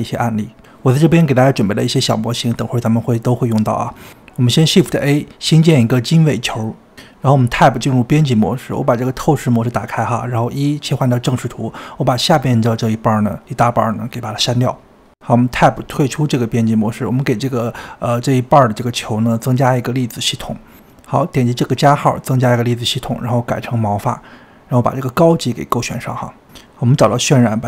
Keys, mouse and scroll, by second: 0.1 g, 0.3-1.2 scroll up 13, 0.5 middle click, 1.2-2.1 scroll down 4, 1.4 shift+middle click, 2.1 click, 2.4 click, 2.6 shift+middle click, 3.1 click, 3.3 middle click, 3.6 click, 4.1 scroll down 1, 4.3 shift+middle click, 4.9-5.3 scroll up 3, 6.7 shift+a, 7.3 Tab, 9.5-11.6 drag, 11.6 KP_1, 14.1 click, 14.6 x, 16.3 Tab, 17.7 middle click, 18.5 scroll up 2, 18.7 Tab, 19.0 scroll down 3, 19.7-22.1 shift+middle drag, 22.1-26.9 drag.